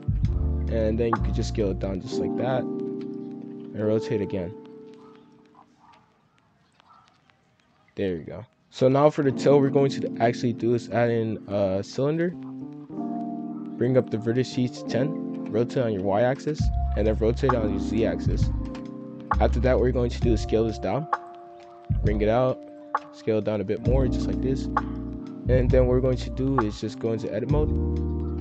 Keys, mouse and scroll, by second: 0.0-2.4 typing, 3.5 r, 4.1 g, 4.5 s, 5.5 scroll down 4, 6.0 r, 7.2 s, 8.5 F2, 8.9 scroll up 2, 9.0-9.4 middle drag, 9.4-10.7 scroll down 3, 10.7 shift+a, 12.4 scroll down 4, 12.8 scroll up 2, 13.7-15.3 drag, 15.3 r, 17.1 r, 19.2-22.4 typing, 22.0 scroll up 7, 24.6 shift+middle click, 25.4-26.5 drag, 27.4 z.